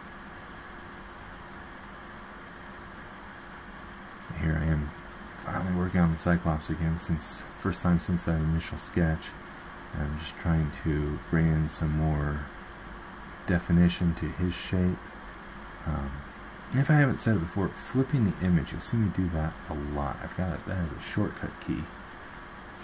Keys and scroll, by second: 15.3 ctrl+h, 18.2 alt+Tab.